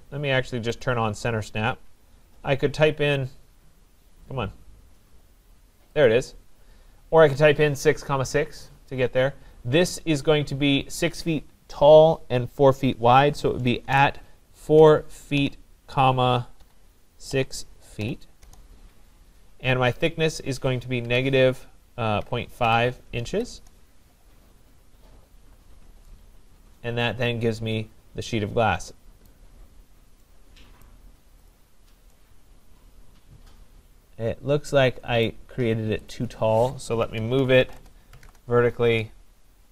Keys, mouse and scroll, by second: 0.8 click, 6.1 click, 7.0-7.3 scroll down 4, 9.0-9.6 scroll down 3, 13.8-18.1 typing, 15.4-16.6 scroll, 18.4 Return, 20.2-21.1 typing, 22.3-24.0 typing, 25.1-25.6 scroll, 25.6 Return, 25.6 scroll down 1, 25.6 scroll up 4, 26.5 scroll, 27.3 middle click, 29.3 right click, 29.7 middle click, 29.9 scroll, 30.9 right click, 31.5 click, 35.3 right click, 36.1 click, 37.0-38.3 typing.